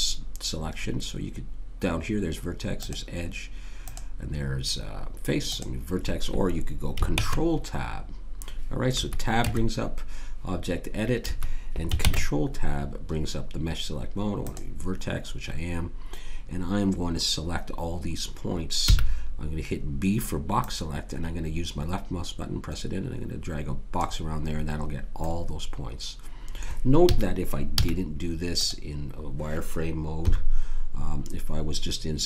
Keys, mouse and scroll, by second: 2.8-5.4 drag, 7.1 ctrl+Tab, 9.4 Tab, 12.0 ctrl+Tab, 18.9 b, 25.2 middle click, 27.0 a, 27.8 z, 30.2 KP_3.